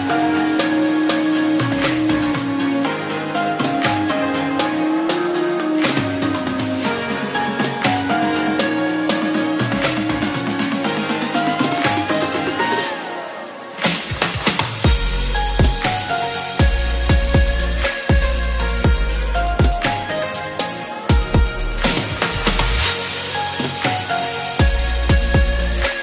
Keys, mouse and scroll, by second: 7.8 click.